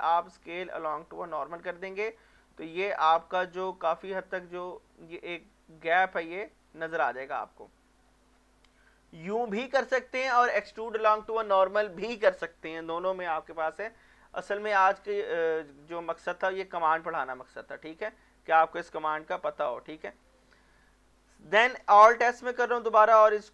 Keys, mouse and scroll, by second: 2.0 click, 2.4-5.4 middle drag, 5.4 scroll up 1, 5.8 middle click, 6.6 scroll up 1, 7.1 middle click, 8.0 scroll down 1, 8.6 middle click, 14.5 middle click, 15.1-18.0 shift+middle drag, 19.1 z, 20.3-22.5 shift+middle drag, 22.5 alt+s.